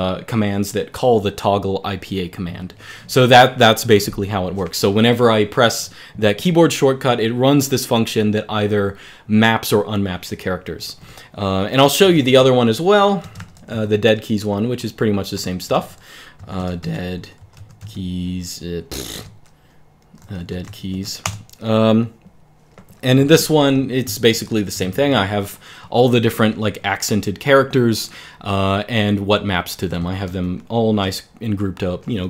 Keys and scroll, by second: 11.6-18.4 typing, 18.9 Escape, 19.7-21.3 typing, 22.4-23.6 typing, 24.1 ctrl+d, 30.2 typing.